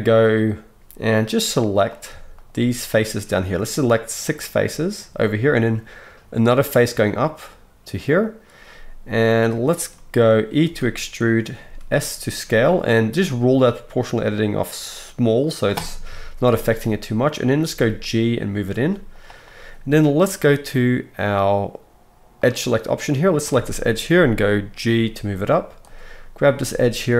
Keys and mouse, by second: 2.0 shift+right click, 2.3 shift+middle click, 2.4 shift+right click, 2.9 shift+middle click, 3.0 shift+right click, 3.7 shift+middle click, 3.8-16.6 shift+right drag, 4.3 shift+click, 4.3 shift+middle click, 10.6 e, 11.6 s, 16.0 KP_1, 16.6-22.4 drag, 17.6 g, 22.4 middle click, 23.4-26.5 shift+drag, 24.9 g, 26.5 middle click, 26.6-27.1 drag, 26.6 g.